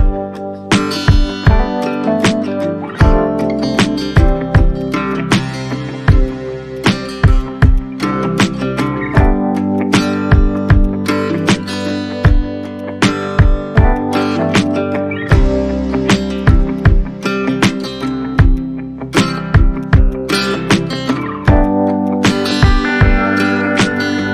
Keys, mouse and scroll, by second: 20.3-20.6 scroll down 1, 20.8 scroll up 1, 22.0 right click.